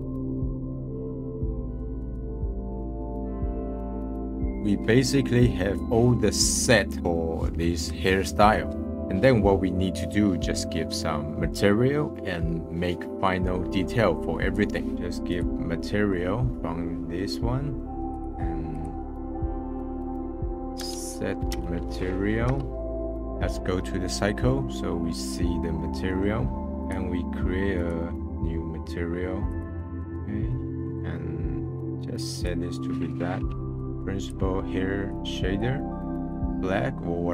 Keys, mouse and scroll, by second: 0.8-1.2 scroll up 3, 1.0 click, 1.2 click, 1.6 scroll down 1, 1.8-2.5 drag, 2.5 middle click, 2.5 scroll down 1, 2.7 click, 4.0-4.5 drag, 4.5 middle click, 15.9 middle click, 18.1-23.1 drag, 26.3 scroll down 4, 26.9 click, 27.9-29.7 drag, 30.3 scroll down 1, 30.5 middle click, 31.0 scroll up 5, 31.8 click, 32.5-33.6 drag, 33.6 middle click, 33.8 click, 35.2 click.